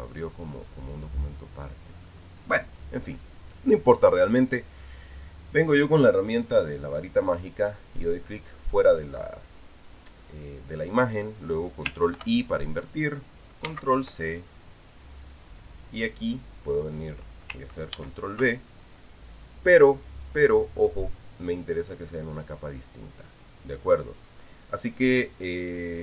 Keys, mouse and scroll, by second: 1.4 click, 3.2 click, 3.8 click, 12.9 ctrl+i, 14.4 ctrl+c, 16.0 click, 18.7 ctrl+v.